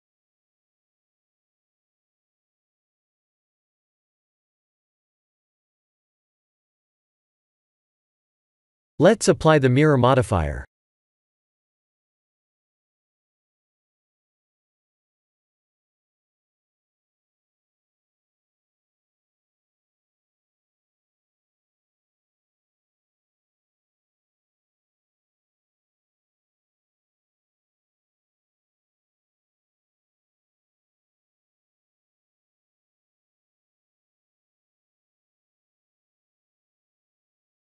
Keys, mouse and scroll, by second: 0.0 click, 0.5 click, 0.8 middle click, 4.4 click, 5.1 KP_1, 7.5 click, 8.5 click, 13.5-14.0 scroll up 3, 14.2 shift+middle click, 15.0 click, 16.3 g, 18.4 ctrl+z, 21.3 Tab, 21.9 a, 22.5 g, 25.9 r, 29.0 Tab, 29.4 scroll down 4, 32.1 click, 32.6 middle click, 32.7 middle click, 33.0 middle click, 33.6 middle click, 34.0 middle click, 34.1-34.5 middle click, 34.2 middle click, 35.5 click, 36.3 middle click, 37.4 middle click.